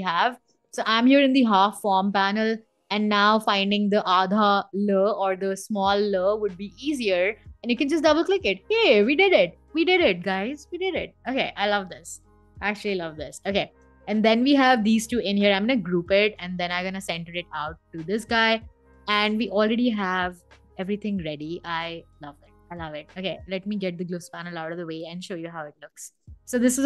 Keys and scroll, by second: 10.5 Escape, 12.4 BackSpace, 12.6 v, 15.1 super+g.